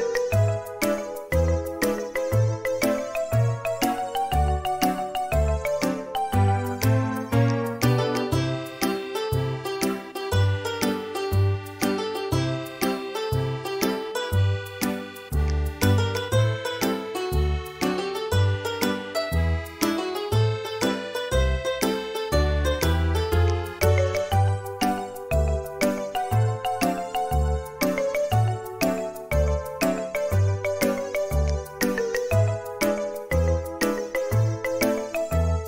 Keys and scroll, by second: 1.8 e, 3.6 Escape, 3.8 e, 8.3 ctrl+z, 12.5 space, 17.6 Escape, 18.3 Escape, 28.6 ctrl+z, 35.5 space.